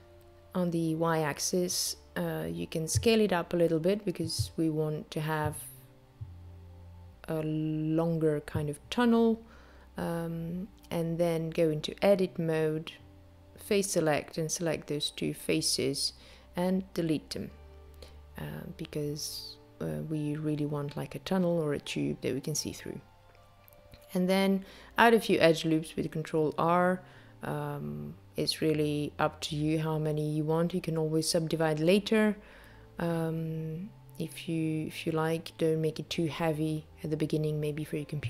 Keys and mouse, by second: 4.8 s, 9.3 Tab, 12.8 click, 13.8 click, 15.8 shift+click, 17.1 x, 23.6 ctrl+r.